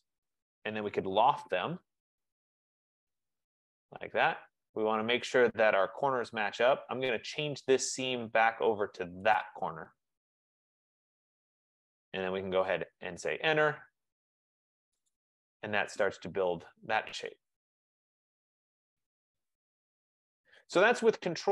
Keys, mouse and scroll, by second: 1.0-3.2 typing, 2.7 Return, 3.2-4.6 drag, 8.0 click, 9.2 F15, 9.5 click, 12.5 Return, 15.3 click, 20.8 right click.